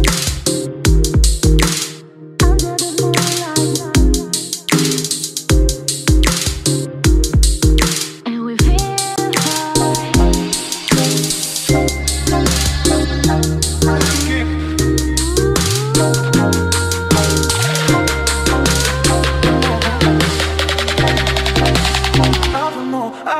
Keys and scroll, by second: 15.6 ctrl+c, 16.7 ctrl+v.